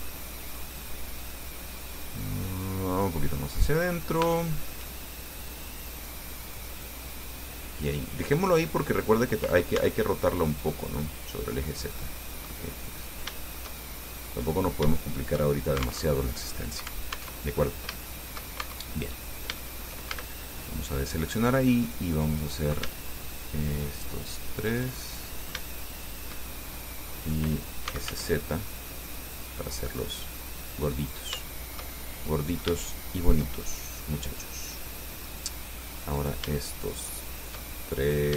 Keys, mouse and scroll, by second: 2.2-3.4 drag, 3.4-4.6 middle drag, 4.6 shift+middle click, 4.7 shift+click, 5.8-7.3 drag, 9.5 scroll down 1, 10.0 Tab, 11.6-11.9 scroll down 1, 12.0 click, 13.1 click, 14.4 click, 16.3 alt+Tab, 17.6 alt+Tab, 18.2 shift+click, 18.9 shift+Tab, 19.2-19.6 shift+scroll up 3, 19.8 shift+click, 20.3 shift+a, 20.8-22.1 shift+drag, 22.6 right click, 23.9 shift+right click, 24.8 shift+right click, 25.2 shift+middle click, 26.4 shift+right click, 26.7-27.7 shift+middle drag, 27.9-28.8 typing, 31.2 click, 31.7-33.0 shift+drag, 33.8-35.7 shift+drag, 36.4 shift+right click, 37.2 shift+right click, 37.8 shift+middle click.